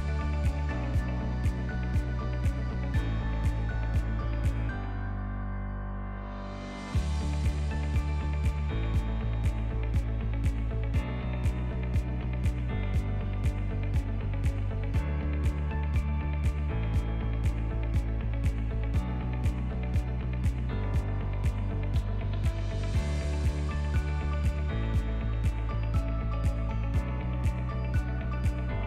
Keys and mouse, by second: 0.4 click, 2.4-3.4 drag, 4.9 click, 7.4 click, 8.6-9.3 drag, 10.6 click, 11.1 middle click, 12.0 middle click, 12.6 middle click, 12.9 middle click, 13.7 middle drag, 15.2 click, 19.3 middle click, 20.1 middle click, 21.0 middle click, 22.7 click, 23.8-26.2 drag, 24.7 KP_0, 27.5-28.8 drag.